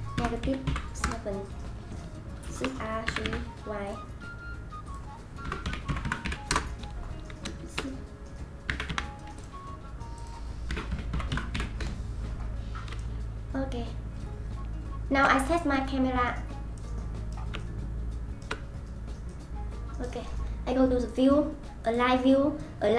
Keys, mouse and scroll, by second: 2.5 shift+d, 4.8-7.6 drag, 7.6 shift+d, 10.2-13.0 drag, 13.0-15.8 shift+middle drag, 15.8-16.3 scroll down 1, 16.3-16.8 scroll down 1, 16.8-18.6 middle drag, 18.6-19.3 scroll down 1, 19.3-19.8 middle drag, 21.0-22.9 drag.